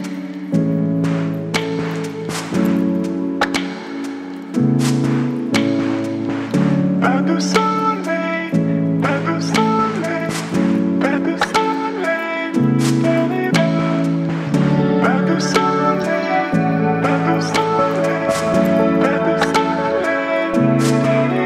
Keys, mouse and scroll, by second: 0.4-2.3 alt+drag, 4.1 v, 5.7 right click, 5.7 right click, 7.5 click, 10.1 right click, 10.9 click, 13.2 click, 15.6-18.4 drag.